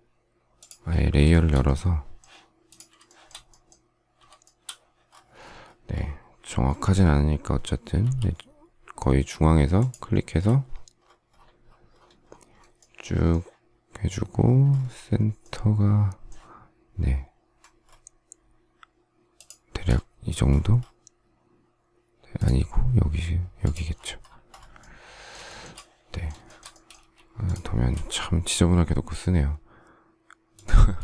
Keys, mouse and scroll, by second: 1.3 shift+middle click, 3.0 shift+middle click, 3.2 shift+double middle click, 4.4 shift+middle click, 8.0 m, 10.6 shift+scroll, 12.8 shift+middle click, 14.4 shift+scroll up 1, 15.4 shift+middle click, 17.6 shift+scroll up 1, 19.3 shift+click, 25.5 shift+middle click, 26.4 shift+middle click, 30.5 shift+click.